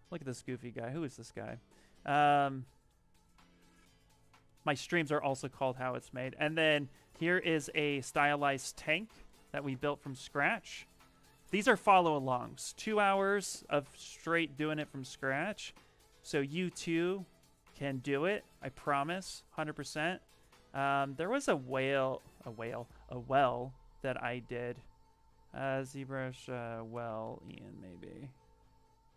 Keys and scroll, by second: 11.6 ctrl+v, 26.4-27.6 typing.